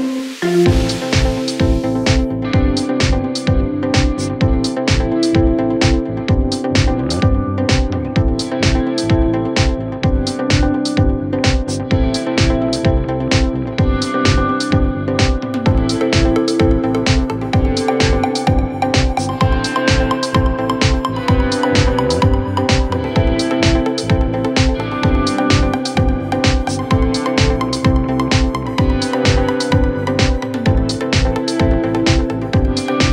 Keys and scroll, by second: 1.8 f, 3.8 ., 4.3 4, 4.8 4, 11.0 2, 12.3 F1, 15.0 Return, 15.2 Escape, 16.0 \, 16.4 ], 17.3 shift+i, 22.6 ], 22.7 Delete, 23.3 4, 26.3 F1, 31.5 ctrl+z.